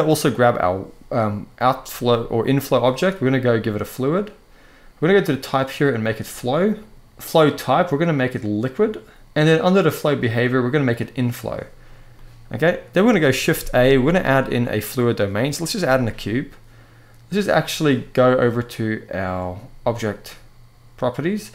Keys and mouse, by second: 0.1-1.6 drag, 3.7-4.6 drag, 4.9-6.0 drag, 7.0-8.4 drag, 9.8 click, 11.9-12.5 middle drag, 13.3 shift+a, 18.3 click.